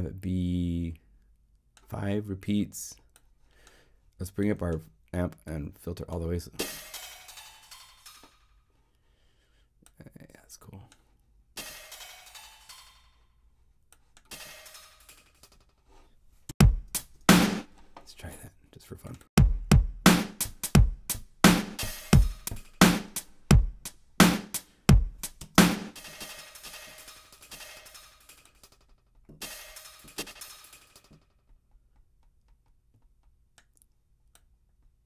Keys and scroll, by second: 16.4 Home, 17.0 0, 25.4 0.